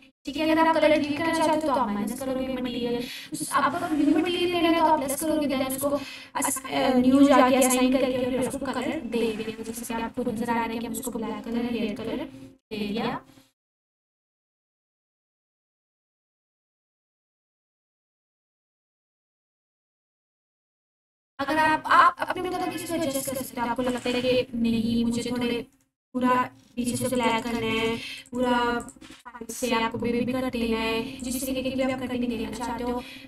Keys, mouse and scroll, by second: 2.3-4.6 scroll up 1, 7.2 click, 15.5-17.5 drag.